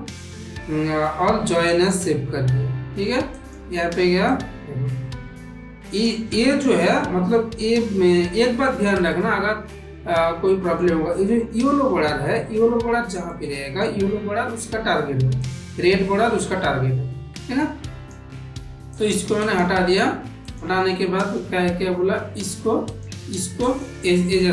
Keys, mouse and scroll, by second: 3.2 click, 4.2-5.9 drag, 9.0 shift+middle click, 9.6-10.7 middle drag, 13.1 middle click, 15.4-18.0 drag, 18.8 click, 19.4 click, 20.4 click, 21.1 click, 22.8 click, 23.6 shift+click.